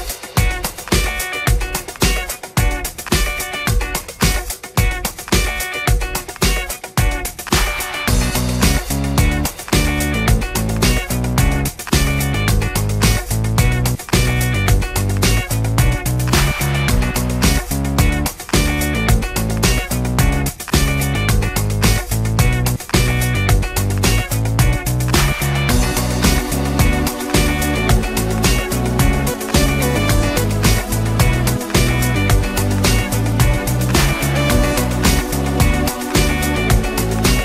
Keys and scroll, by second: 6.5 Return, 16.7 Return, 20.0 Return, 23.5 Return, 26.2 Return, 33.3 Return, 35.8 Return.